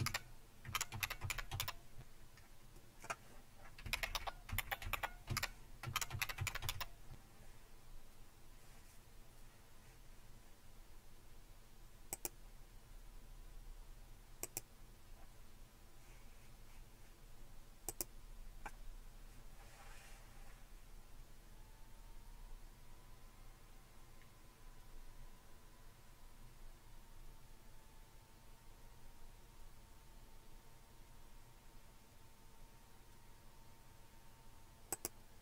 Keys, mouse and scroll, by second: 0.0-2.0 typing, 2.7 click, 3.6-7.1 typing, 12.1 click, 14.4 click, 17.9 click, 34.9 click.